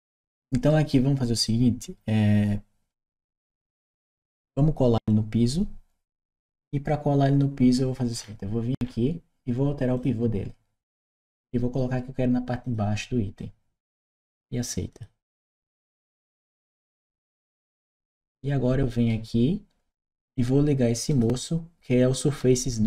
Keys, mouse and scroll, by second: 1.3-4.3 right drag, 8.6 middle click, 9.8 click, 12.4 click, 14.7 click, 17.8-18.9 right drag, 20.9 click, 22.7 click.